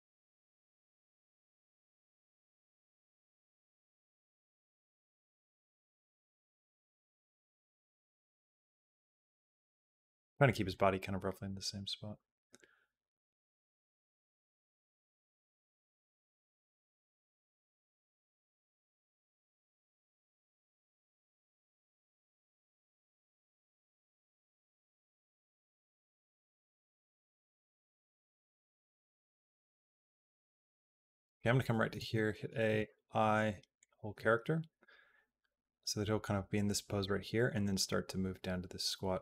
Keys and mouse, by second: 0.6 r, 1.8 g, 4.4-7.4 drag, 8.3 g, 10.5-31.1 drag, 31.8 a, 32.6 i, 34.8-39.2 drag.